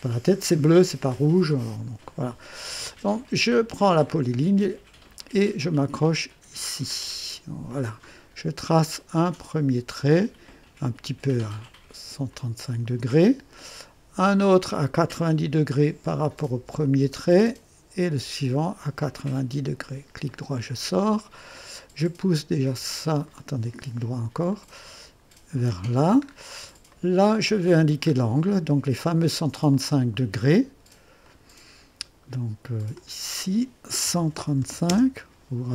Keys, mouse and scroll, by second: 4.1 click, 7.7 click, 12.3 click, 16.8 click, 19.2 click, 20.3 right click, 23.3 right click, 24.5-26.0 drag, 26.2-26.5 scroll up 1, 26.9-27.8 right drag, 28.0 scroll down 1, 29.7 click, 31.2 click, 32.9 click, 34.0-34.7 typing, 34.9 Return.